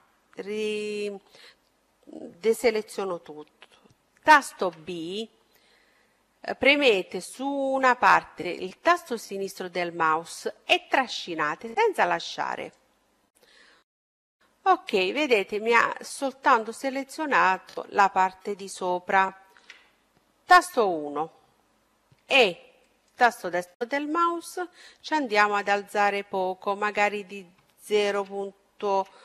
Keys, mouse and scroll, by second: 4.4 b, 13.6-15.1 middle drag, 18.4-20.5 middle drag, 19.8 KP_1, 22.1 e, 24.2-26.0 drag, 26.6-28.5 drag.